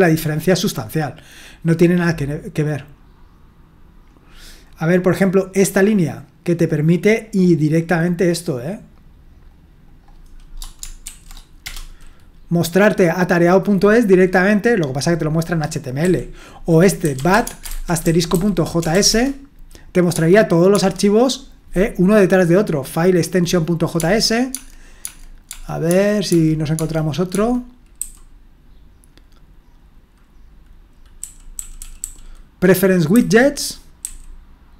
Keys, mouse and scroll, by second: 3.4-5.8 scroll down 1, 5.8-9.2 drag, 9.5-10.5 drag, 11.0 ctrl+v, 11.6 Return, 16.0-19.1 typing, 20.1-20.7 typing, 24.0-25.5 typing, 28.0 typing, 31.2-32.0 typing, 33.1-34.0 typing.